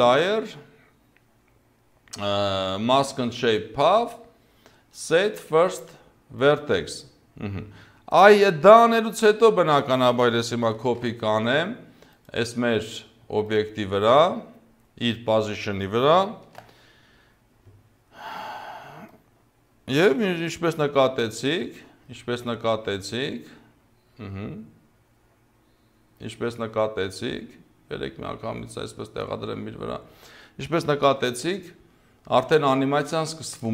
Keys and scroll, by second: 10.8 ctrl+c, 16.5 ctrl+v, 31.1 0.